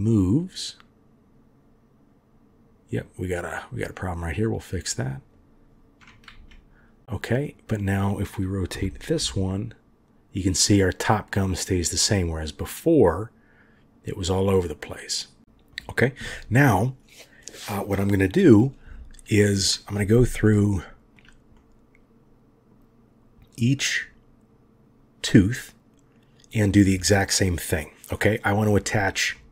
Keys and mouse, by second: 6.3 ctrl+z, 7.5-8.7 drag, 8.7 r, 20.5-21.1 shift+drag, 21.5-22.4 drag, 21.5-22.4 right drag, 22.4 middle click, 29.3-29.5 middle drag.